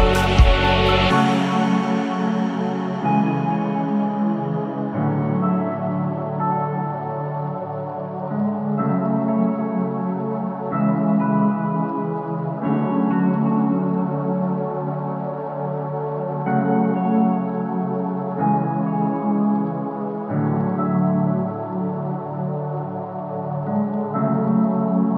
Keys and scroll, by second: 13.6 g.